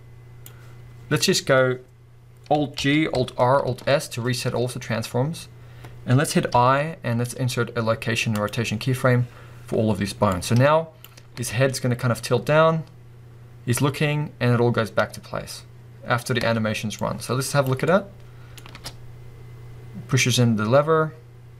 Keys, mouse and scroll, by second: 1.2-2.8 scroll up 2, 2.8 alt+g, 3.1 alt+r, 3.6 alt+s, 11.2 scroll down 1, 11.4 space, 16.4 space, 17.9-21.5 middle drag, 18.7 space.